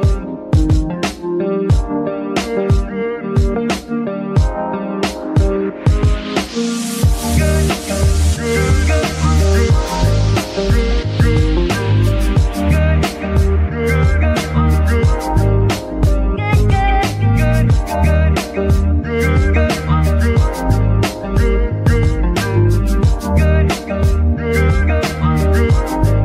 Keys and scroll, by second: 8.0 [, 16.8 g, 17.4 Tab, 17.9 s, 18.6 Tab, 19.0 s, 20.0 KP_3, 20.5 shift+KP_3, 22.2 g, 22.4 y, 25.1 g, 25.2 y.